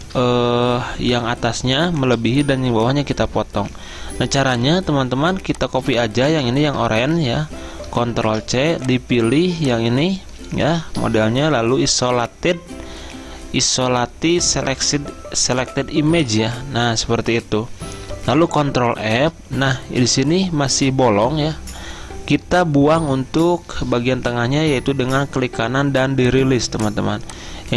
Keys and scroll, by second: 6.7 ctrl+z, 8.3 ctrl+c, 19.2 ctrl+f.